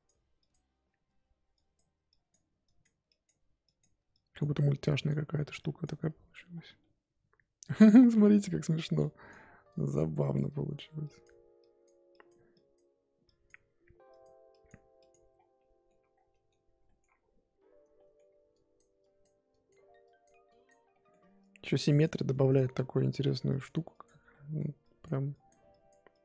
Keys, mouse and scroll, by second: 6.5 scroll down 3, 6.8 middle click, 7.7-8.2 scroll up 6, 8.0 middle click, 9.0-15.3 drag, 15.3 scroll down 1, 15.5 middle click, 16.1 scroll down 4, 16.3 middle click, 16.6-17.9 scroll up 5, 16.8 middle click, 17.9 middle click, 18.1 scroll up 2, 18.5-20.9 drag, 20.9 middle click, 21.4-24.3 drag, 24.3 middle click, 24.8-26.2 drag.